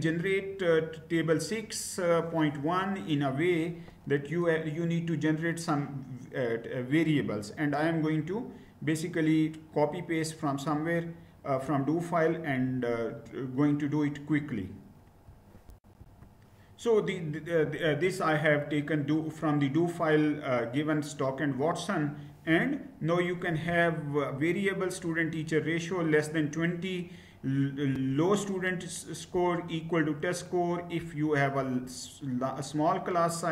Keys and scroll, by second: 15.4 shift+F9, 15.5 ctrl+c, 15.5 ctrl+v.